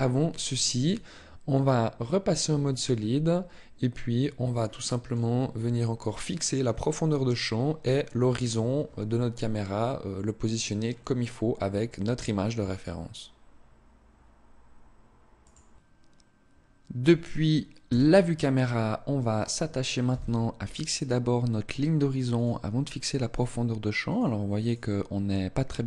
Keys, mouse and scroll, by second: 0.4 click, 2.7 middle click, 5.3-6.9 scroll up 2, 17.7 KP_0, 19.9 n, 22.1 click, 23.9 click, 24.5 click.